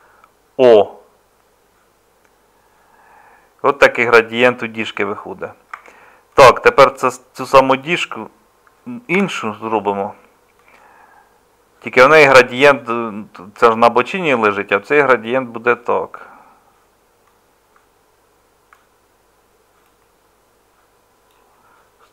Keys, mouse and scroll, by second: 3.2 middle click, 5.7 Tab, 9.1 ctrl+l.